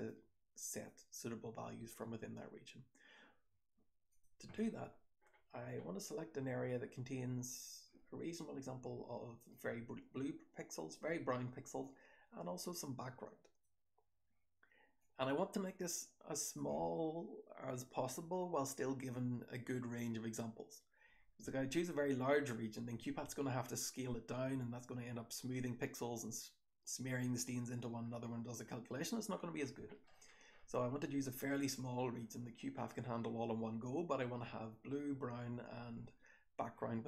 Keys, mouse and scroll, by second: 0.1-0.8 drag, 1.9-3.2 scroll down 1, 4.0 click, 9.4-10.9 drag, 11.7-13.5 drag, 14.9-16.5 drag, 21.7-23.2 scroll down 1, 23.2-25.9 scroll down 1, 25.9-27.2 scroll down 1, 27.2-28.6 scroll down 1, 28.6-29.9 scroll down 1, 29.9 scroll down 1, 30.1-33.9 scroll up 1, 33.9-35.2 scroll up 1, 35.2-37.0 scroll up 1.